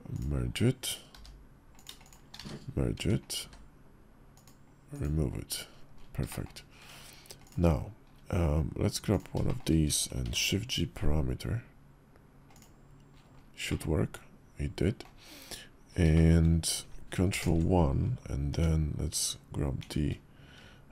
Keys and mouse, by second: 0.9 g, 2.1 1, 2.7 Tab, 3.1 click, 3.2 q, 6.0 shift+click, 6.6 Tab, 7.2 click, 9.2 shift+click, 10.0 shift+g, 13.4-14.8 middle drag, 15.9 shift+middle click, 17.1 ctrl+KP_Add, 18.3 Tab, 19.6 shift+1.